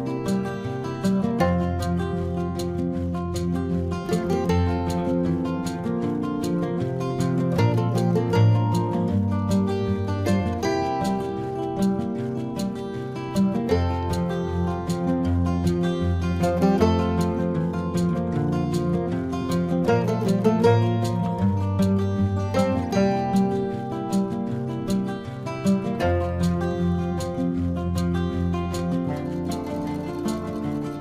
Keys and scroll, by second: 0.5 ctrl+-, 0.8 ctrl+-, 1.1 space, 1.2 ctrl+-, 1.3 space, 1.4 ctrl+-, 1.5 space, 3.8-8.7 typing, 4.4 ctrl+-, 5.1 ctrl+-, 5.6 ctrl+-, 5.8 ctrl+-, 9.7-12.2 typing, 13.8 space, 14.8 space, 15.8 space, 16.2 space, 16.5 space, 19.8-21.5 typing, 22.4 ctrl+alt+z, 22.6 ctrl+alt+z, 23.3 ctrl+alt+z, 24.1 ctrl+alt+z, 25.3 ], 25.3 space, 25.8 ctrl+alt+z, 26.1 space, 26.3 space, 26.8 ctrl+alt+z, 27.0 ctrl+alt+z, 27.5-30.4 typing, 27.7 ctrl+-, 28.2 ctrl+-, 28.6 ctrl+-.